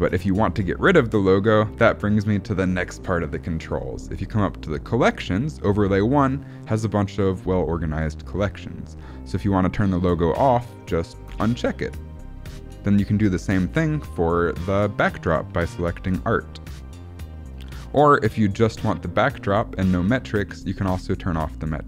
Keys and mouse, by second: 5.0 click, 11.2 click, 16.0 click, 18.5 click, 20.5 click.